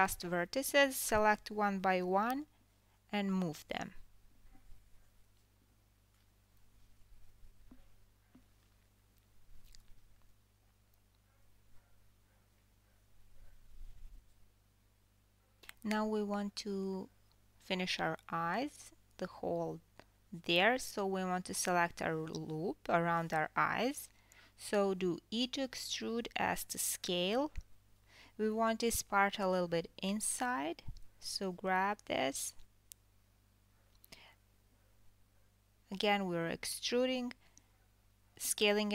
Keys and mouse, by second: 0.4 g, 3.4-3.8 drag, 4.1-5.8 typing, 4.4-5.2 drag, 6.4-7.3 drag, 7.3-8.6 middle drag, 8.1 g, 8.6-9.4 drag, 9.4-38.9 middle drag, 9.7 KP_1, 12.3 click, 13.1 g, 14.8-15.4 drag, 15.4 Tab, 16.3 KP_4, 16.6 KP_1, 18.7 alt+click, 20.1 KP_1, 24.0 e, 31.3 g, 37.5 KP_1.